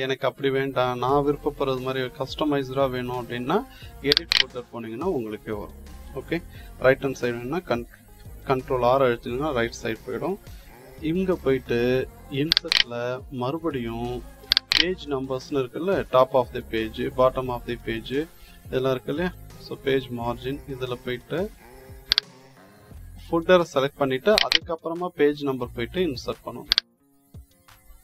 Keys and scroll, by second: 7.4 ctrl+r.